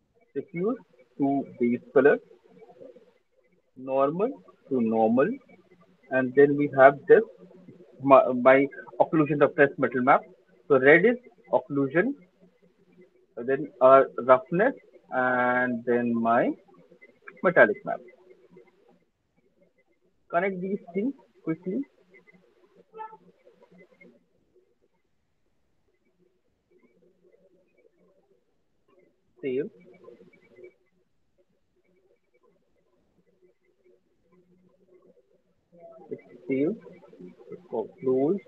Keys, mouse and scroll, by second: 0.4 click, 2.1 click, 3.1 click, 6.2 click, 6.4 click, 9.7 right click, 12.2 click, 15.6 click, 17.7 click, 19.2 click, 21.5 click, 21.5 right click, 22.3 click, 22.9 click, 24.3 click, 24.3 right click, 25.5 click, 27.2 click, 37.7-38.4 drag.